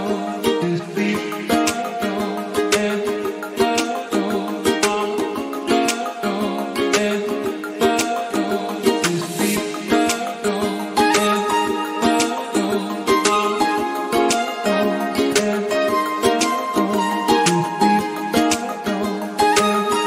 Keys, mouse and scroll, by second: 0.1 click, 0.6 s, 1.4 g, 1.8 click, 1.9 scroll down 1, 2.1-2.8 scroll up 3, 2.8 s, 3.8 g, 4.9 click, 4.9-5.6 scroll down 4, 5.4-6.0 scroll up 4, 6.0 click, 6.4 s, 6.9 s, 7.6 click, 7.8 scroll down 4, 8.0 shift+middle click, 8.1-8.8 scroll up 2, 8.4 click, 8.9 s, 9.4 click, 9.6 scroll down 1, 9.8 scroll up 1, 10.1 click, 10.2 s, 10.8 click, 10.9 scroll up 2, 11.1 shift+middle click, 11.5 click, 12.0 s, 12.4-13.0 scroll down 3, 12.6 click, 13.0-13.6 scroll up 5, 13.6 click, 14.6 r, 15.9 click, 16.3-16.8 scroll down 1, 16.8-17.4 scroll up 1, 17.4 scroll up 3, 17.4 click, 18.1-19.0 scroll up 3, 18.2 shift+middle click, 19.0 r, 20.0 click.